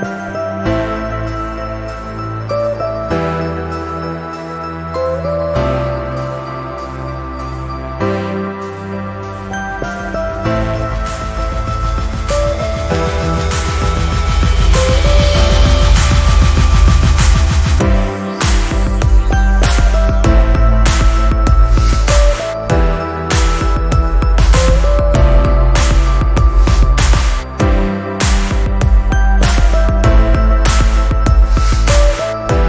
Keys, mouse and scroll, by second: 2.0-2.9 drag, 6.0-6.8 ctrl+scroll up 1, 6.9-7.8 click, 8.0 ctrl+scroll down 1, 8.8 ctrl+scroll up 1, 10.5-11.0 ctrl+scroll down 1, 12.0 v, 12.8 shift+click, 13.9 click, 14.3 ctrl+scroll up 1, 14.9-15.2 ctrl+scroll up 1, 15.2 click, 17.4-18.0 ctrl+scroll up 1, 18.0-20.8 drag, 21.2 Delete, 21.9-22.6 ctrl+scroll down 2, 22.6-23.2 ctrl+scroll down 1, 23.6 click, 23.7-26.5 drag, 30.2-31.2 alt+drag.